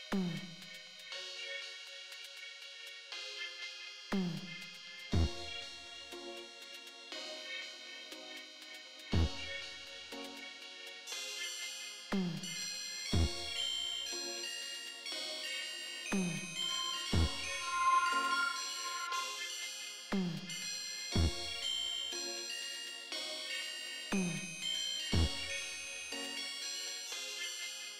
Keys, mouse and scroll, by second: 1.9 click, 3.0-4.5 drag, 4.8 middle click, 6.2 click, 7.1 click, 10.7 click, 11.5 click, 14.2 click, 15.3 click, 15.8 click, 17.6-20.4 drag, 23.3 click, 27.7 click.